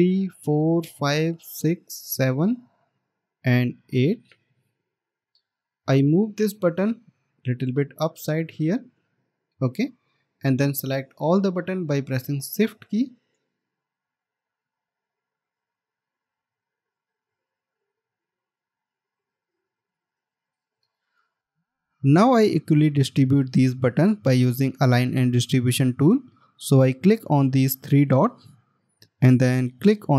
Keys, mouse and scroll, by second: 0.0 ctrl+d, 4.3 ctrl+d, 6.0 alt+scroll up 1, 10.2 alt+scroll down 1, 11.8 scroll up 1, 14.3 shift+click, 16.4 scroll up 1, 18.4 shift+click, 20.3 shift+click, 21.3 shift+click, 21.8 scroll up 1, 24.2 scroll down 1.